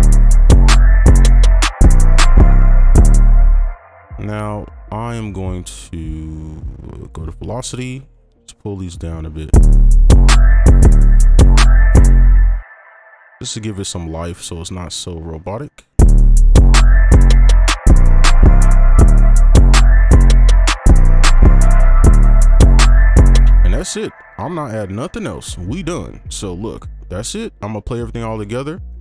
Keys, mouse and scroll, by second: 1.0 double click, 2.9 space, 3.1 space, 9.5 space, 10.6 space, 10.8 space, 12.0 space, 12.4 double click, 18.7 space, 19.0 space, 21.8 space, 22.0 space, 23.4 space, 24.0-27.4 scroll down 1, 28.3 double click.